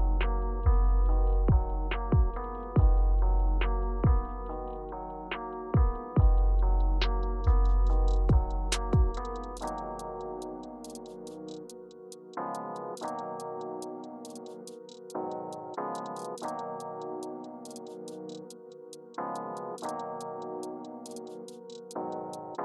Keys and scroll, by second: 19.8-20.9 typing.